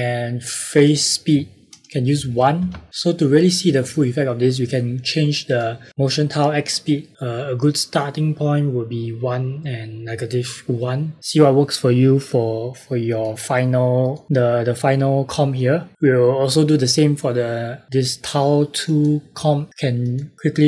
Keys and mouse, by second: 0.6 click, 2.1 KP_1, 2.5 KP_Enter, 2.9 click, 5.4 click, 13.0 click, 15.9 click, 18.8 click.